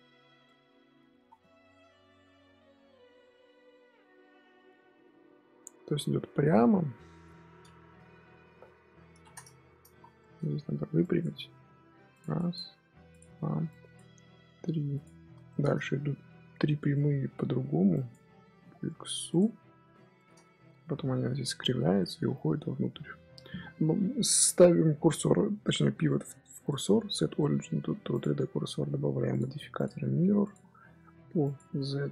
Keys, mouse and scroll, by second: 0.3 middle click, 1.0 Tab, 1.2 scroll up 1, 1.3-4.3 middle drag, 6.6-7.9 middle drag, 7.9 KP_1, 9.0 ctrl+KP_3, 9.5 Tab, 9.8 z, 10.1 shift+middle click, 10.4-10.9 scroll up 5, 10.9 click, 11.5 g, 12.3 click, 12.6 g, 13.6 click, 14.1 g, 15.4 shift+middle click, 15.6 scroll up 1, 15.8-17.8 middle drag, 17.8 click, 18.4 g, 20.1 middle click, 20.4 Tab, 20.6 z, 21.4 z, 21.9-22.3 middle drag, 22.3 scroll down 1, 22.5 scroll up 1, 22.6 scroll down 3, 22.7-25.8 middle drag, 26.5-29.2 right drag, 29.2 click, 29.7-31.5 drag.